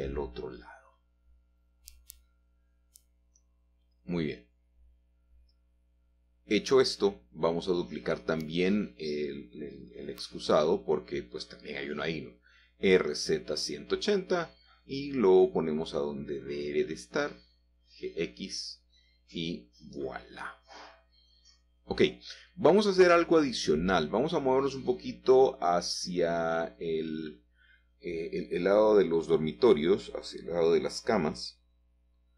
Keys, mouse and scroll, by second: 0.4 g, 0.9 z, 1.8 alt+Tab, 3.9 shift+middle click, 9.3 g, 10.0 shift+z, 11.8 click, 13.1 z, 13.4 1, 13.5 8, 13.7 0, 14.3 Return, 16.4 g, 17.1 x, 19.4 click, 19.8-20.9 scroll down 2, 21.3 shift+middle click, 22.7-23.8 scroll down 2, 25.5-27.0 shift+middle drag, 29.2-31.1 shift+middle drag, 31.6-32.3 scroll up 3.